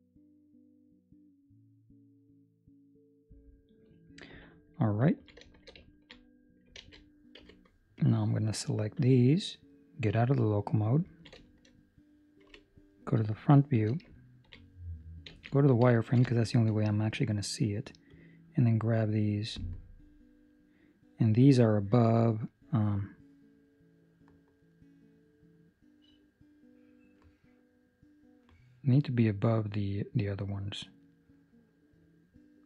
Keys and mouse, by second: 1.0 ctrl+x, 4.9 ctrl+middle click, 5.4 shift+middle click, 5.7 ctrl+middle click, 6.7 alt+a, 7.3 b, 10.0 KP_Divide, 11.0 ctrl+middle click, 12.4 KP_1, 13.2 shift+middle click, 14.1 ctrl+middle click, 15.2 z, 15.9 ctrl+middle click, 16.3 shift+middle click, 17.3 click, 18.0 click.